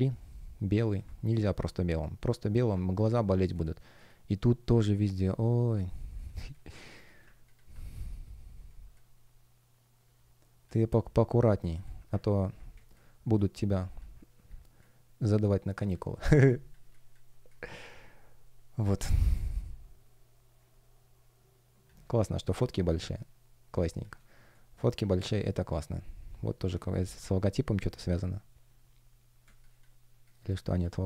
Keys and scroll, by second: 1.3 F1, 6.4 space, 8.6 space, 12.6 space, 19.0 space, 29.4 space.